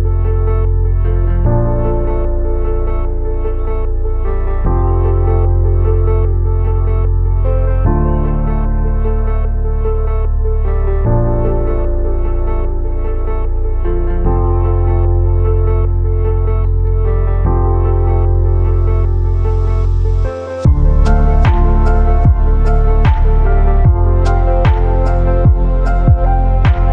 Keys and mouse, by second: 0.7 a, 5.0 ctrl+z, 5.9 shift+middle click, 6.2 a, 6.5 ctrl+s, 6.7-8.7 middle drag, 9.6 shift+middle click, 10.3-12.8 middle drag, 13.3-15.5 middle drag, 16.1 shift+middle click, 16.6 click, 17.1 g, 17.9 click, 18.0 g, 19.8 click, 20.0 g, 20.7 click, 20.7 g, 21.4 click, 21.6 g, 22.7 middle click, 24.0 click, 24.2 g, 25.0 click, 25.2 g, 26.0 click, 26.1 g.